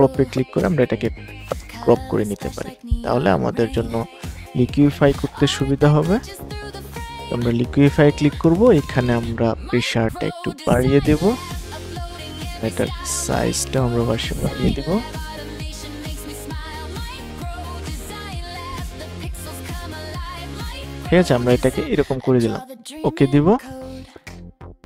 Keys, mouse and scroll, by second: 0.0 Return, 2.7-21.8 drag.